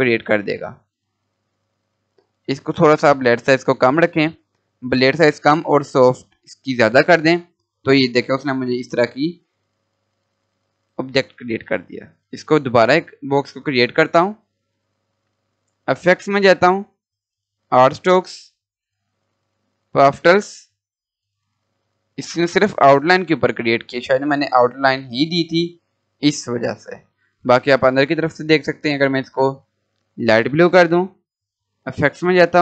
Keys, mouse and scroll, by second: 5.0 scroll up 1, 7.0 scroll down 1, 10.6 Delete, 12.0-13.6 drag, 13.6 scroll down 1, 14.8 click, 19.8 click, 25.6-26.1 scroll up 1, 29.4 click.